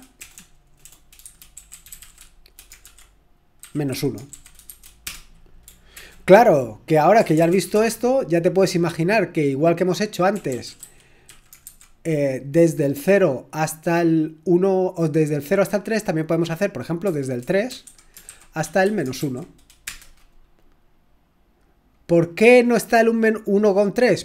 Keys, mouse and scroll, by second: 0.0-4.7 typing, 5.1 Return, 6.0 ctrl+l, 6.9-8.1 typing, 10.1-12.1 typing, 17.1 typing, 18.4-19.2 typing, 19.8 Return.